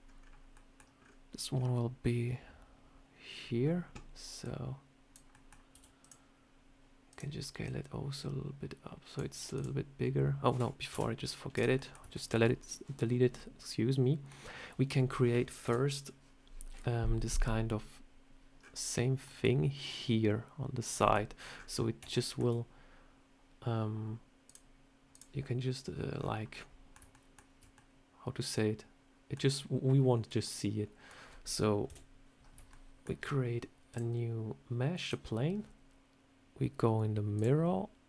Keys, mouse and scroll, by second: 3.3 scroll up 3, 4.3 click, 5.2 middle click, 5.6 s, 7.0 click, 7.5 click, 9.4 click, 10.8 Delete, 10.8 End, 11.4 click, 11.7 middle click, 12.0 shift+middle click, 12.5 scroll up 1, 13.3 middle click, 15.5 KP_7, 20.9 middle click, 21.4 scroll up 3, 21.6 scroll down 1, 22.0 shift+middle click, 24.4 click, 26.0 scroll down 4, 26.4 middle click, 27.0 shift+middle click, 27.5 scroll down 1, 27.6 middle click, 30.3 middle click, 31.8 KP_7, 32.6 shift+middle click, 33.8 click, 37.3 click.